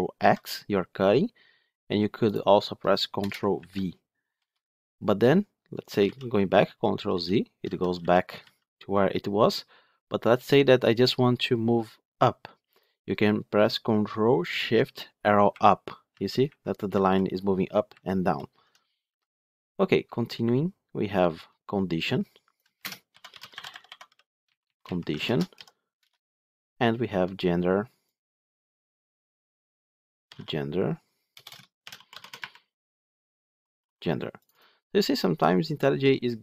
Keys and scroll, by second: 0.1 ctrl+x, 5.9 ctrl+z, 7.0 ctrl+z, 7.5 ctrl+z, 15.4 ctrl+shift+Up, 16.0 ctrl+shift+Down, 16.4 ctrl+shift+Up, 16.8 ctrl+shift+Down, 17.2 ctrl+shift+Up, 17.8 ctrl+shift+Down, 18.1 ctrl+shift+Up, 25.1 ctrl+shift+Right, 25.9 Return.